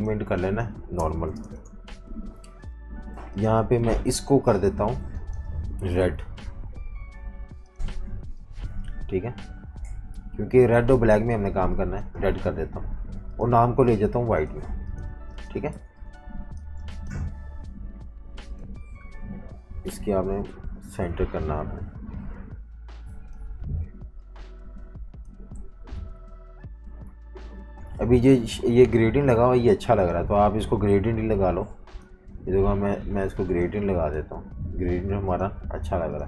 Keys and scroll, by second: 0.0-1.9 typing, 4.7-6.0 typing, 8.5 typing, 12.2 v, 12.4 space, 15.1 v, 15.3 space, 15.7 z, 16.6 v, 19.9 Up, 20.5 Left, 20.9 Left, 25.7 Left, 25.9 Down, 26.7 Left, 27.6 v, 30.9 i.